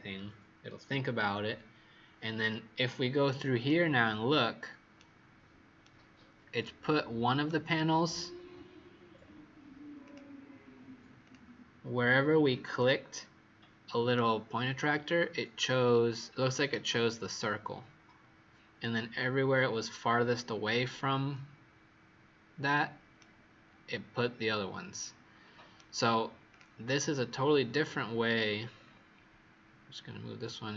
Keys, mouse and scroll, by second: 3.6 right click, 8.3-9.0 scroll down 2, 9.0-9.7 scroll up 2, 9.7 scroll up 2, 9.9 click, 14.1 right click, 26.4 click, 28.5-29.7 scroll down 5, 29.7-30.7 scroll down 2.